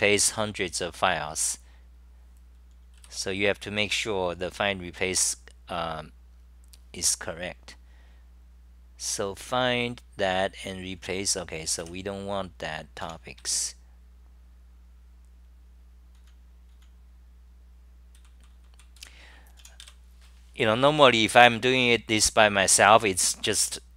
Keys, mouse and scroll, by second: 7.6 ctrl+Tab, 7.6 j.